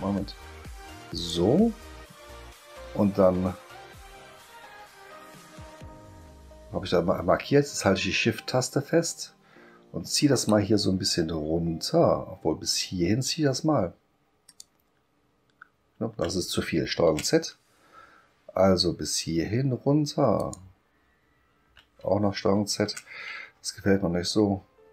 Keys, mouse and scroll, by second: 1.1 click, 14.5 shift+click, 20.4 shift+click, 22.7 ctrl+z.